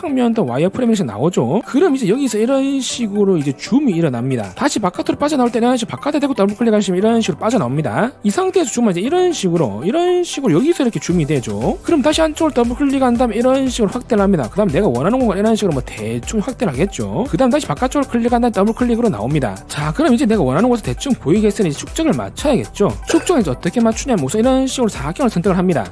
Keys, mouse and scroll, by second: 3.0 scroll up 1, 4.3 scroll up 2, 7.4 click, 7.5 click, 9.3 middle click, 9.5 scroll up 1, 10.7-11.0 scroll up 2, 11.4 scroll down 3, 11.6 scroll up 1, 13.0 click, 13.2 click, 13.9-14.5 scroll up 3, 14.9 middle click, 15.4 middle click, 15.8 scroll down 1, 16.0 middle click, 19.3 click, 19.4 click, 19.4 right click, 20.0 right click, 20.2 a, 20.6 right click.